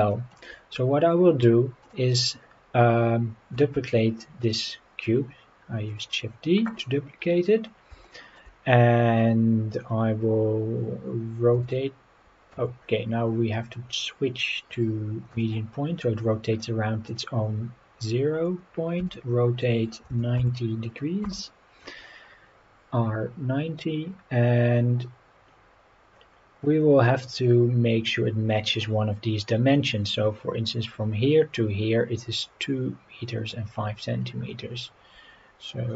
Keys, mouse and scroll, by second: 0.1 shift+middle drag, 1.8 click, 3.8 shift+d, 5.9 click, 7.5-7.8 scroll down 2, 8.1-8.4 shift+middle drag, 9.6-10.0 scroll up 2, 10.0 scroll down 1, 11.7 r, 12.5 Escape, 13.9-15.4 drag, 16.9 scroll up 3, 19.0 r, 20.1 KP_9, 20.4 KP_0, 21.3 Return, 22.2 scroll down 2, 22.9 scroll down 1, 25.0-25.3 scroll up 3, 25.7 scroll down 2, 26.6-27.4 scroll up 5, 30.1-30.5 scroll up 2, 33.2 scroll down 3, 34.4 scroll down 2.